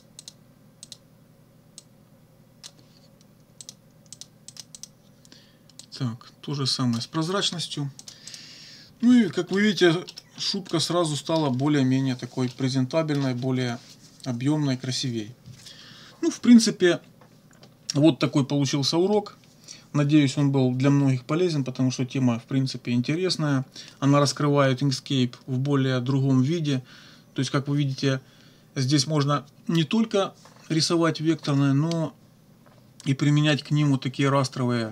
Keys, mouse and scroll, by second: 0.2 middle click, 0.8 click, 1.8-2.8 drag, 2.8 middle click, 3.6 click, 4.2 click, 4.5 click, 5.8-7.2 drag, 8.0 click, 9.0 -, 9.5 middle click, 10.1 middle click, 10.7 click, 12.5 click.